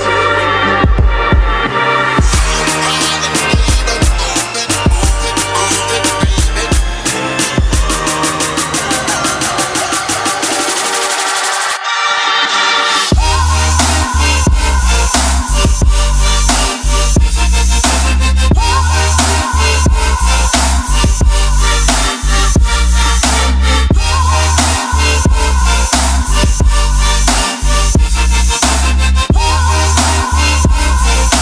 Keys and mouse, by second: 0.0 shift+click, 1.0 shift+click, 4.2 click, 4.6 shift+click, 5.0 f, 6.0 ctrl+z, 6.4 click, 6.7 middle click, 7.3 x, 9.3 middle click, 11.1 middle click, 11.6 ctrl+middle click, 11.9 shift+middle click, 12.2 Tab, 12.7-14.7 drag, 16.4 KP_1, 17.0 middle click, 17.4 ctrl+r, 17.8 Tab, 18.1 ctrl+r, 21.9 click, 26.7 click, 29.1 click, 29.3 middle click.